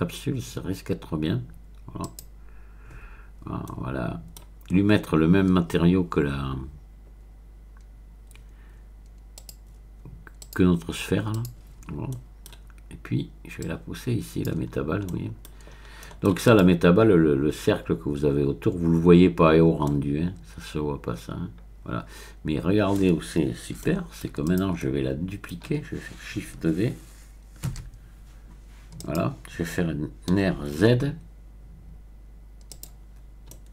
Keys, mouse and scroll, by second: 2.0 click, 3.6-4.4 scroll up 1, 4.4-4.7 scroll up 1, 9.4 click, 9.6-10.4 scroll up 1, 10.4 click, 11.3 click, 12.1 middle click, 13.6-14.7 drag, 14.7-15.4 scroll down 1, 15.4 middle click, 15.7-16.4 scroll up 1, 16.4 click, 19.8-23.3 middle drag, 23.8 shift+middle click, 24.4 click, 24.8 middle click, 27.8 shift+d, 29.0 click, 30.4 r, 30.8 z, 32.7 click, 33.5 scroll down 1.